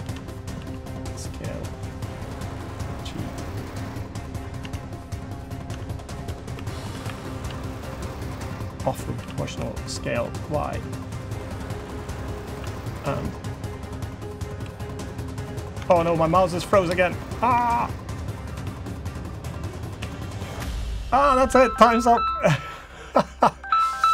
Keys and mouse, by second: 0.3 s, 2.8-4.3 drag, 4.3 Tab, 4.8-5.2 middle drag, 5.4 Tab, 5.9 Tab, 6.3 3, 6.6 Tab, 6.8 3, 8.9 s, 11.8 click, 12.3 2, 17.3 Tab, 17.3 2, 17.5 2, 18.0 click, 18.3 g, 19.7 1, 20.1 g, 21.2 Tab, 21.4-21.8 drag, 22.1 click, 23.0-23.3 drag.